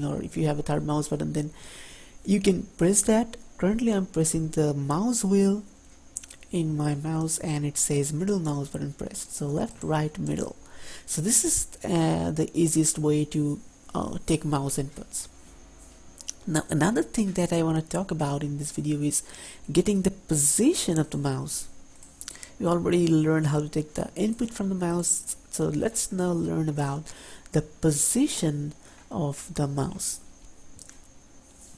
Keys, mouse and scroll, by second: 9.4 click, 9.9 right click, 10.5 middle click.